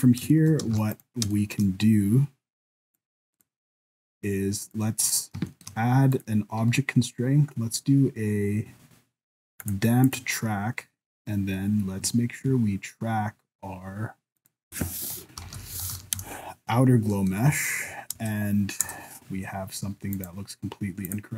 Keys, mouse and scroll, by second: 0.0 ctrl+s, 0.0 alt+a, 0.3 shift+middle click, 0.7 ctrl+s, 0.9 right click, 1.3 shift+middle click, 1.8 scroll down 1, 2.9 click, 3.3 click, 3.9 click, 4.6 click, 5.3 scroll up 1, 5.5 shift+middle click, 6.1 click, 10.0 click, 12.1 shift+middle click, 14.4 click, 15.7 t, 17.1 middle click, 18.1 KP_0, 18.8 KP_0, 20.1 click, 21.0 click.